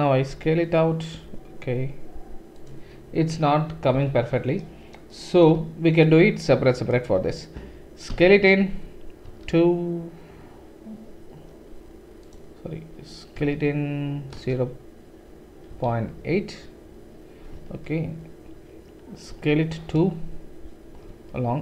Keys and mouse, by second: 0.3 s, 3.9 ctrl+z, 6.0 shift+right click, 6.0 typing, 6.4 shift+click, 8.1 s, 19.3 s.